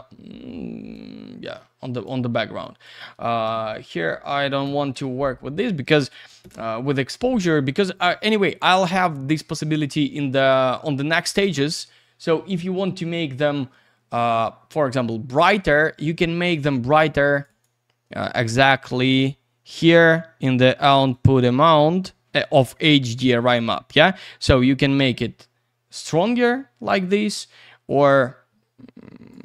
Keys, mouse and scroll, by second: 0.9 click, 2.6 click, 3.4 typing, 4.6 BackSpace, 4.9 Return, 16.4 middle click, 17.0-17.3 scroll up 1, 17.3 click, 17.5 click, 17.6 double click, 21.1 click, 22.8 click, 24.5 click.